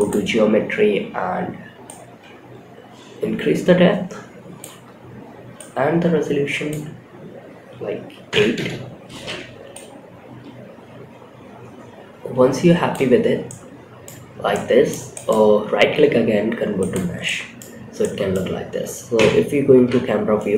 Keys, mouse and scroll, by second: 1.2-3.9 drag, 4.9-8.0 shift+drag, 9.0-12.2 shift+drag, 12.8-13.4 middle drag, 13.6 scroll up 1, 13.8-14.2 middle drag, 14.4-16.6 right drag, 16.6-16.9 middle drag, 17.1 scroll down 2, 17.3 middle drag, 18.4 KP_0, 19.2 scroll down 2, 19.6 scroll up 2.